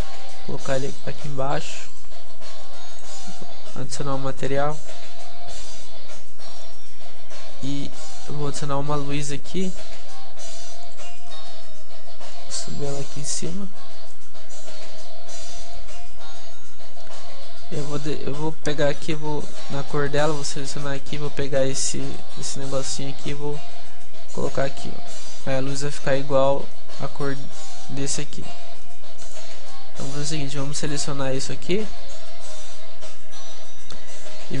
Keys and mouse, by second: 0.5 s, 1.3 s, 2.1 a, 2.3-5.8 middle drag, 3.0-5.8 right drag, 6.8-8.3 middle drag, 8.3 shift+s, 12.4-14.3 drag, 14.3-15.8 middle drag, 15.8-17.5 drag, 20.7-22.3 drag, 26.6-29.3 middle drag, 29.3-34.6 right drag.